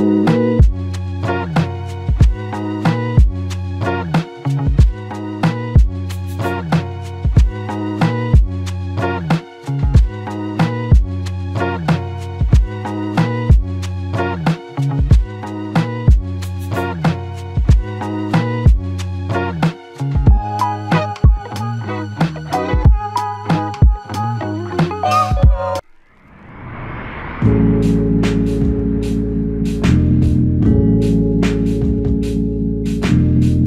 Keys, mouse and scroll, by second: 3.9 alt+click, 6.2 alt+click, 10.7 ctrl+click, 11.9 ctrl+click, 13.7 shift+click, 13.9 shift+double click, 15.4 shift+click, 21.2 f, 22.2 double click, 24.7 f, 25.9 ctrl+click, 26.8 ctrl+click, 31.6 ctrl+click, 33.4 shift+click.